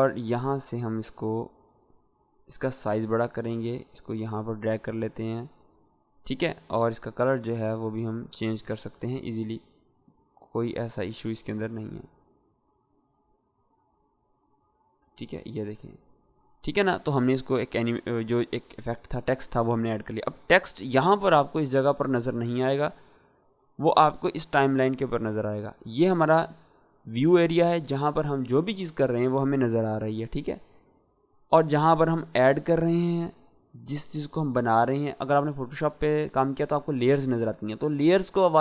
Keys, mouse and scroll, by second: 2.8 v, 3.2-4.1 drag, 6.9 click, 7.7 Escape, 9.6 click, 23.8 click, 31.6-32.2 drag.